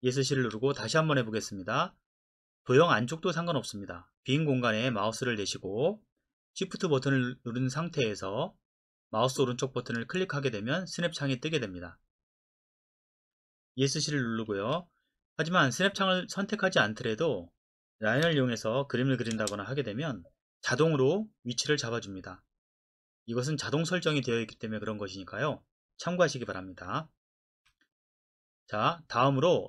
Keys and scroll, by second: 0.5 Escape, 14.6 Escape, 18.2 l, 19.3 space, 27.5 Escape.